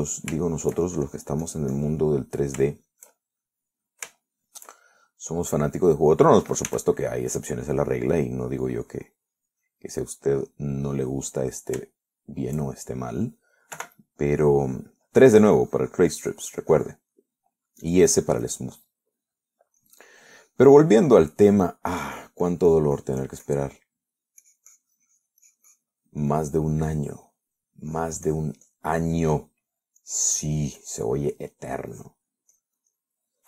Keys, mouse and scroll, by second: 0.9 middle click, 1.7 shift+middle click, 2.3 shift+click, 3.3 shift+middle click, 3.9-5.1 shift+middle drag, 5.5 shift+middle click, 6.4-7.6 middle drag, 7.9 s, 8.2 middle click, 9.1 middle click, 10.1 click, 11.4 click, 11.9 click, 12.3 middle click, 13.3 shift+middle click, 14.0 shift+middle click, 15.0 3, 15.3-16.4 middle drag, 16.6-18.4 drag, 18.4 middle click, 19.1-20.2 drag, 20.2 middle click, 21.0-22.3 drag, 22.4 middle click, 23.2-25.0 drag, 25.0 middle click, 25.7-28.5 drag, 29.2 click, 29.9 click, 30.3 click, 30.7 middle click, 31.3-33.1 drag.